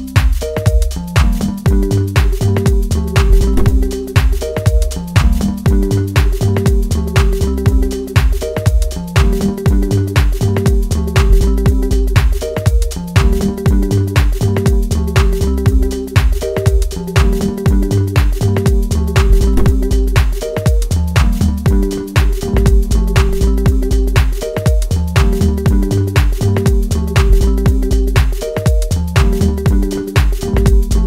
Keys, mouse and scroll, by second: 2.8 click, 3.6-6.0 middle drag, 6.0 click, 7.4-8.9 middle drag, 8.9-9.4 scroll down 1, 9.4-19.1 middle drag, 19.1-19.5 scroll up 1, 19.5-21.4 middle drag, 21.4-22.3 scroll up 1, 22.3-23.0 scroll down 1, 23.0-29.7 middle drag, 29.7-30.3 scroll down 1, 30.4-31.0 alt+middle drag.